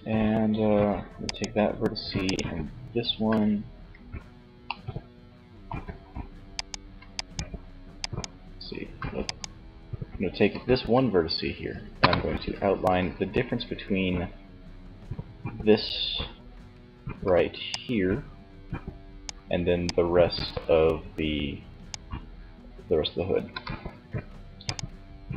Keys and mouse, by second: 2.9 z, 10.9 KP_1, 12.0 z, 16.5 d, 16.8-18.2 drag, 18.5 d, 18.8 d, 21.3 d, 22.7 n.